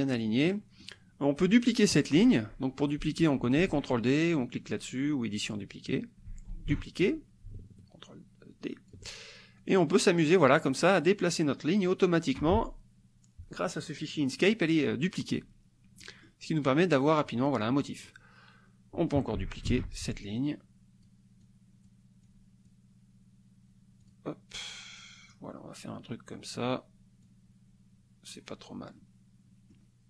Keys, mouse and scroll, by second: 0.0-1.0 drag, 1.1-2.2 scroll up 4, 2.2-6.3 scroll up 2, 6.6 ctrl+d, 7.0-8.9 ctrl+drag, 9.1 ctrl+click, 9.6 click, 10.7 click, 16.0 click, 16.8 click, 17.7 click, 19.7 ctrl+d, 20.3 click, 21.4 click, 22.3 click, 24.0 click, 24.6 click, 27.2-28.5 drag, 29.0 click, 29.2 click, 29.6 click.